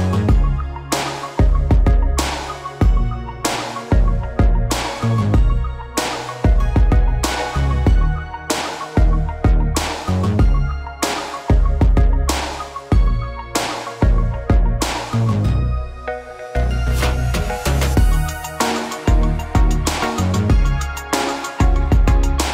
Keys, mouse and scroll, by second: 0.4 click, 7.6 click, 16.6 KP_3, 17.6 Tab, 18.1-19.8 middle drag, 20.1 middle click, 20.2 click.